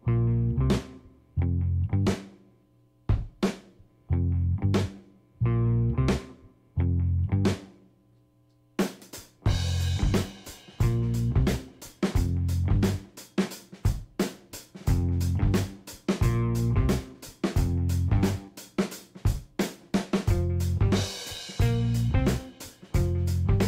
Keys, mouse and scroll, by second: 1.3-7.9 drag, 9.3-10.7 drag, 11.8 ctrl+g, 13.0 click, 13.3 g, 13.5 y, 15.4 click, 16.7-22.0 drag, 22.7 click.